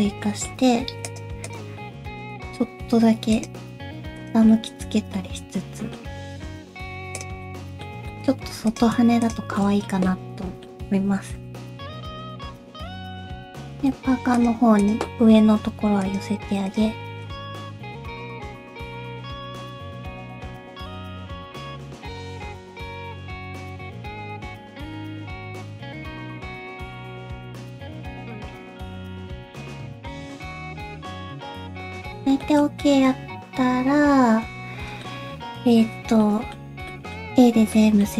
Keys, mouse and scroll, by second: 0.2 middle click, 0.8 3, 1.0 click, 1.4 shift+click, 1.8 shift+middle click, 1.9 middle click, 2.3 middle click, 2.6 r, 3.6 g, 4.5 middle click, 5.1 middle click, 6.5 r, 7.4 middle click, 8.1 shift+middle click, 8.5 2, 8.7 click, 9.2 shift+click, 9.6 shift+middle click, 10.0 middle click, 11.3 g, 12.5 middle click, 13.1 1, 13.3 click, 13.4 middle click, 13.7 g, 14.8 click, 15.0 middle click, 15.6 g, 16.6 click, 16.9 g, 17.5 middle click, 17.5 scroll down 2, 17.6 3, 17.7 click, 17.9 shift+click, 18.1 shift+click, 18.4 shift+click, 18.7 shift+click, 18.9 shift+click, 19.5 middle click, 20.4 middle click, 20.6 r, 21.1 g, 21.5 middle click, 22.3 middle click, 22.6 r, 23.1 r, 23.8 scroll down 2, 23.9 middle click, 24.3 middle click, 24.3 1, 24.4 click, 24.6 middle click, 24.8 g, 25.3 click, 25.4 g, 26.2 click, 26.3 g, 26.7 scroll down 1, 26.8 middle click, 27.3 scroll up 1, 27.4 3, 27.5 click, 27.7 shift+click, 27.8 middle click, 28.3 scroll up 1, 28.4 middle click, 28.8 alt+s, 29.8 r, 30.2 g, 30.7 r, 31.1 middle click, 31.8 shift+middle click, 31.8-32.2 scroll up 2, 31.8 a, 32.4 middle click, 32.8 middle click.